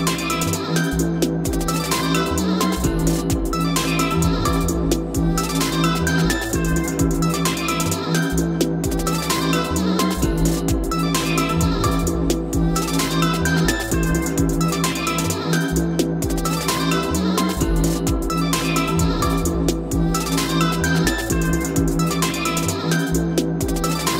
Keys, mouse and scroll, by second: 1.2 click, 1.3 f, 1.6 scroll up 3, 2.4 scroll up 1, 2.5 click, 4.8-5.1 typing, 9.0 click, 10.2 p, 11.7 click.